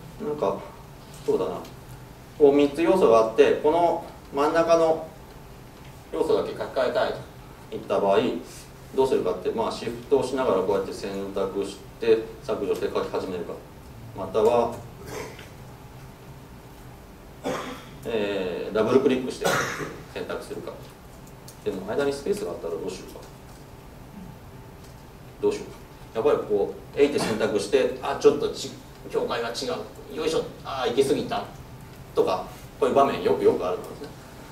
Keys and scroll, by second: 15.8 super+z, 16.5 super+z.